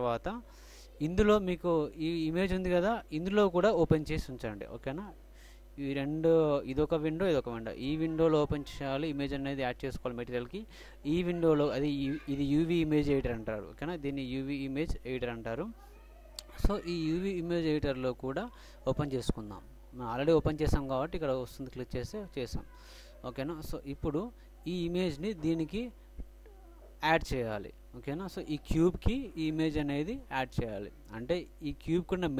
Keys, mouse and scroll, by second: 4.7-7.7 middle drag, 12.8-14.1 middle drag, 14.1-15.9 drag, 19.2-20.9 drag, 22.6 click, 24.2-25.8 middle drag.